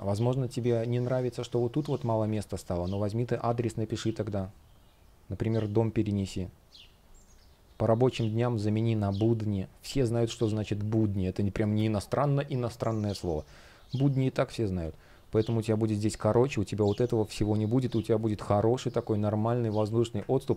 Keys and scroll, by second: 0.7 shift+p, 2.0 super+z, 7.8 shift+p, 14.5 super+z.